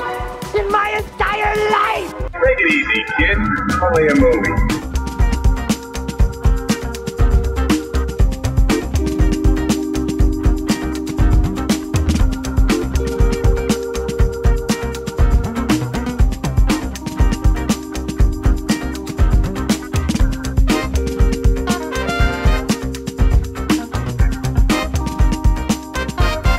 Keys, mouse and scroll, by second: 0.9 g, 2.7 click, 2.7 typing, 3.3 click, 3.6 middle click, 4.6 g, 5.6 click, 5.8 g, 6.4 click, 7.6 click, 8.7 click, 9.4 g, 10.6 click, 11.1 middle click, 11.2 click, 11.7 shift+click, 13.1 g, 13.3 z, 17.5 click, 19.8 l, 21.2 ctrl+v, 23.1 click, 23.6 j, 24.6 ctrl+z, 25.9 l.